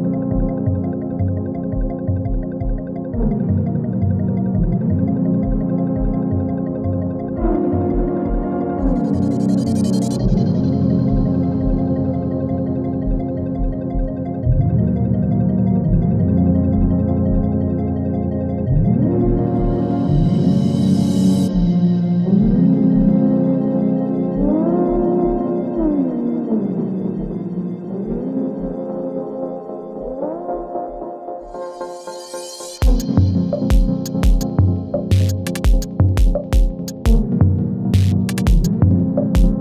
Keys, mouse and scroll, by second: 2.6-3.1 alt+scroll up 1, 3.6-6.3 drag, 6.3 g, 8.0 click, 9.2 g, 9.9 click, 10.9 shift+click, 13.8 shift+click, 14.6 Down, 18.4 click, 20.0 Return, 21.5 click, 24.1 ctrl+alt+Home, 26.0 click, 29.5-37.7 drag, 37.7 ctrl+z, 38.6 click.